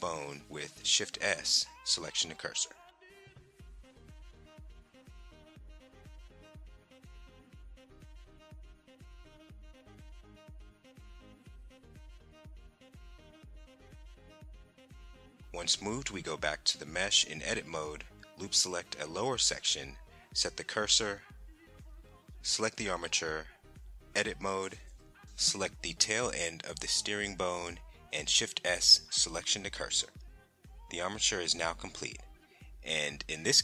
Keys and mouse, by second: 1.0 Tab, 2.8 click, 3.3 Tab, 5.1 shift+d, 5.8 click, 7.5 shift+s, 12.1 click, 13.2 Tab, 14.1 click, 14.6 Tab, 16.3 click, 17.8 alt+click, 18.4 alt+click, 19.1 alt+click, 20.4 shift+s, 23.3 Tab, 24.1 click, 24.9 Tab, 26.3 shift+s, 28.9 Tab, 30.2 click, 30.3-31.4 middle drag, 31.4 click, 32.3 KP_1.